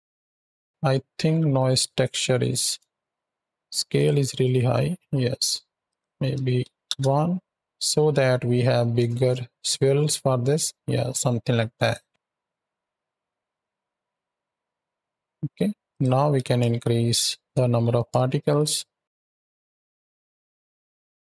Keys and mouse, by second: 0.4 space, 1.3 z, 3.8 ctrl+shift+click, 4.7-5.0 drag, 5.7-6.8 drag, 7.6 middle click, 9.5 ctrl+shift+click, 10.0-11.0 middle drag, 11.7 drag, 11.9 x, 12.1 shift+Left, 12.1-13.1 drag, 12.1 space, 13.5-13.9 drag, 13.9-14.9 middle drag, 15.2 space, 15.8-17.7 drag, 18.3 shift+Right, 18.4 shift+Left, 19.0 space.